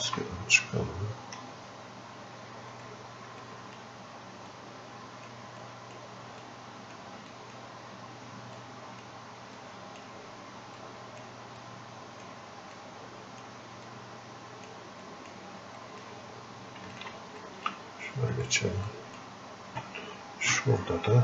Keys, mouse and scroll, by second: 1.6 click, 2.8 right click, 3.4 click, 4.5 click, 5.6 click, 6.4 click, 7.3-15.1 drag, 18.4 right click, 18.9 click.